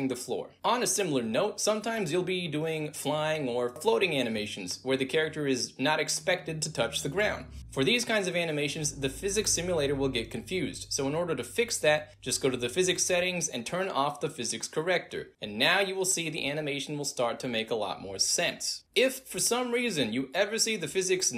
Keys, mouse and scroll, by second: 0.2-0.6 middle drag, 2.4-4.2 alt+drag, 5.2-6.8 alt+drag, 8.4 space, 8.8 click, 9.7 click, 9.9 click, 11.1 middle click, 11.1 scroll up 2, 14.0 click, 16.9-21.3 alt+drag.